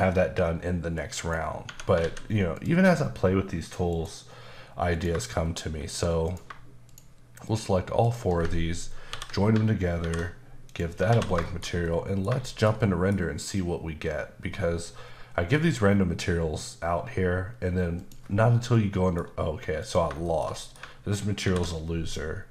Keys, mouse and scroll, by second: 1.0 click, 1.7 Tab, 2.0 alt+a, 2.5 click, 3.9 click, 4.9 click, 6.3 click, 6.8 shift+click, 7.4 shift+double click, 8.0 shift+click, 9.1 ctrl+j, 10.0 alt+m, 10.6 click, 11.1 alt+a, 11.4 shift+middle click, 12.4 shift+middle click, 18.0 click, 18.7 middle click, 19.8 click, 20.2 shift+middle click, 21.4 alt+m, 22.0 click.